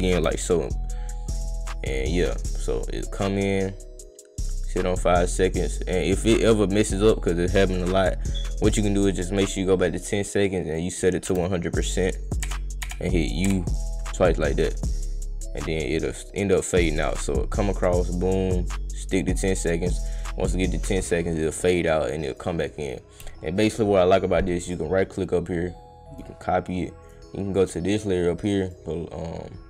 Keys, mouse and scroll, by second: 0.4-3.7 drag, 7.5 click, 10.5 click, 12.2 click, 13.2 click, 13.9 click, 16.3-18.3 drag, 22.3 click, 24.6 right drag, 26.1 click, 27.0 click, 28.6 click.